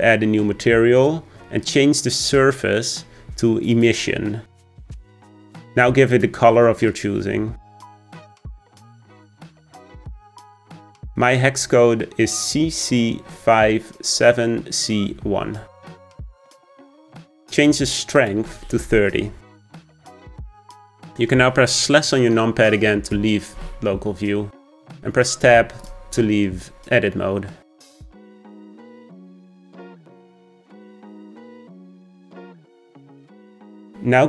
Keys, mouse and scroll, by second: 9.6 click, 18.2-20.9 drag, 23.2 KP_Divide, 24.7 Tab, 25.8 click, 30.4-33.4 scroll down 1.